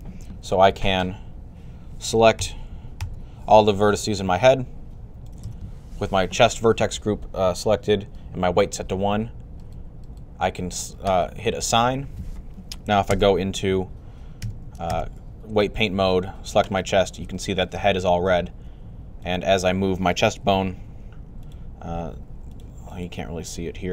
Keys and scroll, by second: 2.2 |, 21.8 typing, 22.9 typing.